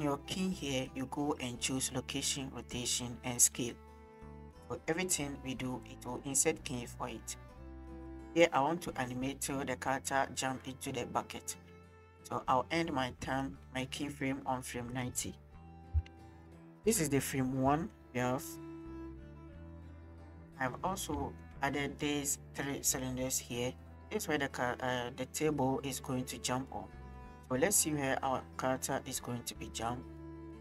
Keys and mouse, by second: 8.4-13.4 drag, 13.7 click, 15.1-16.3 middle drag, 17.7 click, 18.1 shift+click, 18.8 click, 19.7 click, 20.2 shift+drag, 20.8 drag, 21.2 shift+click, 27.8 shift+click, 28.4 drag, 29.3-29.8 drag.